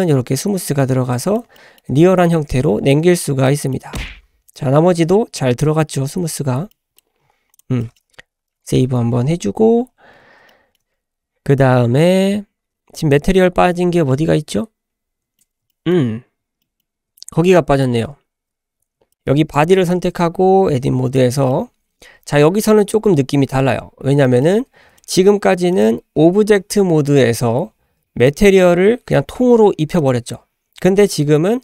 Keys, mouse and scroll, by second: 1.5-1.9 shift+middle drag, 2.3-3.3 middle drag, 3.5 shift+middle click, 4.0-4.5 scroll up 2, 5.7-6.4 scroll down 4, 6.4-6.7 scroll up 2, 6.7-7.0 middle drag, 7.0-7.5 scroll down 2, 7.5 click, 7.8 middle drag, 8.5 ctrl+s, 9.7-10.4 scroll up 2, 10.5-10.8 shift+middle drag, 13.0 click, 13.5-14.1 scroll down 3, 14.1-15.4 middle drag, 15.7 shift+middle click, 16.6 middle drag, 17.1 shift+middle drag, 17.5 middle drag, 18.3 `, 19.5 click, 20.1 Tab, 20.7-21.0 scroll up 2, 21.1 shift+middle click, 22.2 Tab, 23.2-23.8 scroll down 2, 23.8 scroll down 2, 24.2-24.5 shift+middle drag, 25.0 click, 25.7 click, 28.3 click, 28.8 typing, 30.0 click.